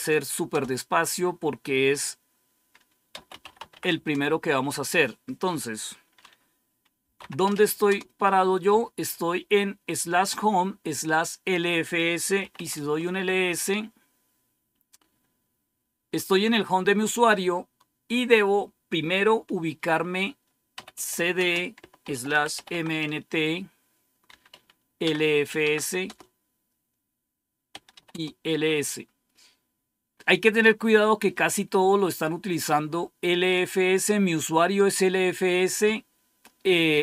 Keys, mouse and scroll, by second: 0.0-0.3 typing, 0.4 Return, 2.8-4.1 typing, 6.7-8.0 typing, 12.0-12.9 typing, 20.4-26.0 typing, 27.0-28.3 typing, 30.2-31.0 typing, 32.4-33.5 drag.